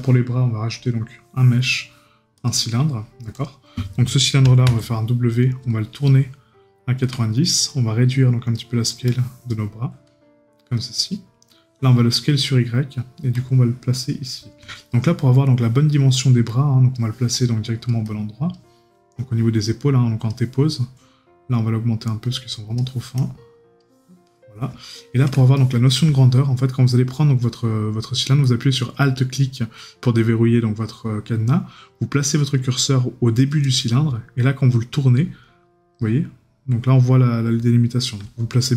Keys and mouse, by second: 14.7 right click, 24.9 right click.